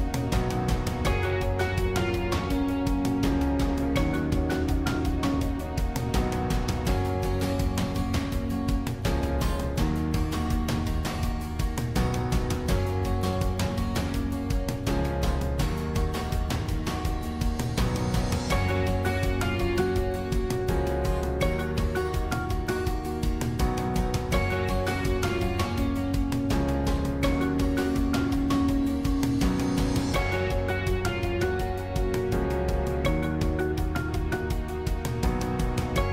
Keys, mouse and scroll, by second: 0.2-3.0 shift+middle drag, 3.0 shift+click, 5.7 s, 8.7 g, 10.9 click, 11.2-13.7 middle drag, 13.7 shift+click, 14.6 shift+click, 15.3-17.2 middle drag, 17.2 shift+click, 18.6 shift+click, 20.1 shift+click, 21.8 shift+click, 22.5 shift+click, 23.7 shift+click, 24.2-25.4 middle drag, 25.4 shift+click, 26.0 shift+click, 26.6-28.2 middle drag, 28.2 shift+click, 29.5 shift+click, 30.4-32.1 middle drag, 32.1 shift+click, 33.5 shift+click, 34.1-36.1 middle drag.